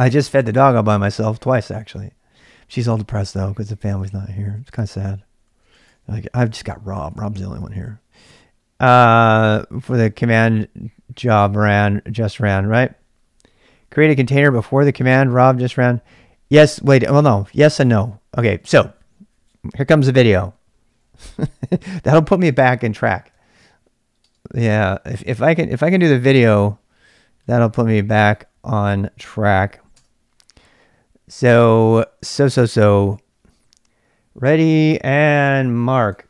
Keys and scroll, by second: 3.9 ctrl+[, 4.0-7.1 typing, 10.3-11.0 typing, 23.4-24.2 typing, 26.1 typing, 29.7 ', 29.9 Return, 30.7 typing.